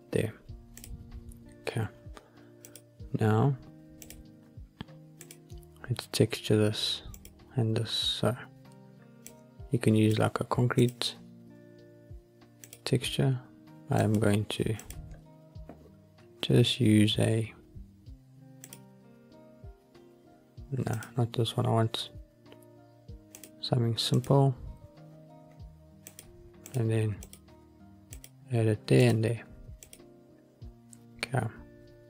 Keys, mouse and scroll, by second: 0.7 click, 2.5 click, 3.9 click, 5.1 click, 7.0 click, 9.2 click, 10.7 click, 12.5-14.1 drag, 14.7-18.7 drag, 20.8-23.3 drag, 24.0 click, 26.0-26.5 drag, 27.1 click, 28.0-30.0 drag.